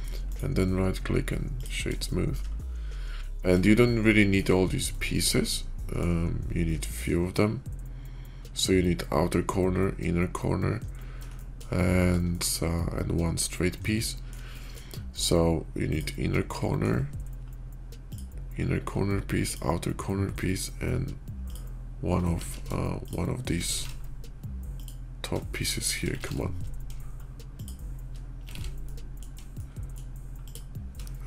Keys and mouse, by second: 0.2-1.5 drag, 1.9 shift+click, 3.6 shift+middle click, 4.8-5.9 middle drag, 6.5-6.9 shift+middle drag, 11.2 shift+middle click, 12.2 shift+middle click, 13.8-14.2 middle drag, 14.4 shift+middle click, 15.6 middle click, 16.3-16.8 middle drag, 17.8 middle click, 19.2 shift+middle click, 22.3 ctrl+z, 22.8 shift+middle click, 23.7 ctrl+z, 24.6 shift+middle click, 25.6 shift+middle click, 25.8 shift+drag, 26.3 ctrl+shift+z, 27.3 shift+click, 28.5 ctrl+z, 28.7-29.1 drag, 29.5-29.8 drag, 29.8 middle click, 30.3 click.